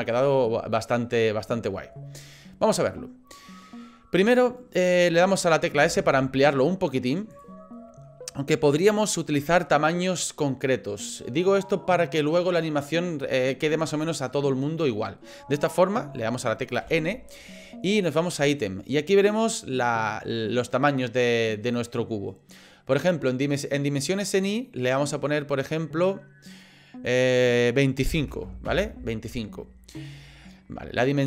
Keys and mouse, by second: 5.8 s, 16.8 n, 24.2-26.6 drag, 27.1-29.5 drag, 30.4-31.2 middle drag.